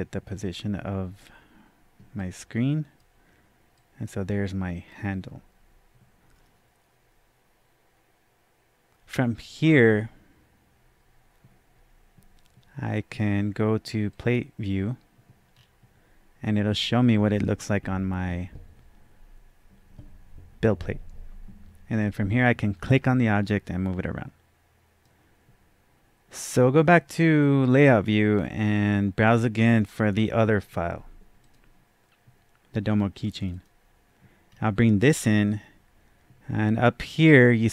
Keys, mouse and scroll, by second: 2.4-3.1 drag, 2.4-2.8 scroll down 1, 4.0-4.9 drag, 14.1-15.4 drag, 14.1 scroll down 1, 15.4 scroll down 1, 15.5-23.5 drag, 23.5-27.3 drag, 27.6-31.4 drag, 33.5 double click, 34.5-35.0 scroll down 1, 35.1-35.5 scroll down 1.